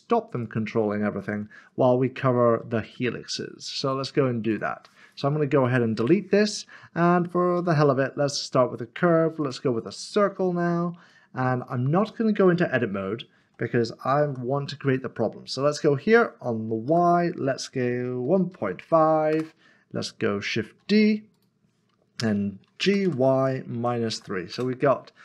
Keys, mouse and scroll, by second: 0.4 click, 1.2 ctrl+z, 3.8 click, 6.0 click, 6.4 middle click, 7.6 a, 9.4 click, 10.4 middle click, 10.5-10.9 scroll up 1, 11.7 middle click, 12.5 shift+middle click, 14.2 g, 16.9 typing, 18.2-18.8 typing, 19.3 Return, 20.8 typing, 23.0-24.1 typing, 24.5 Return.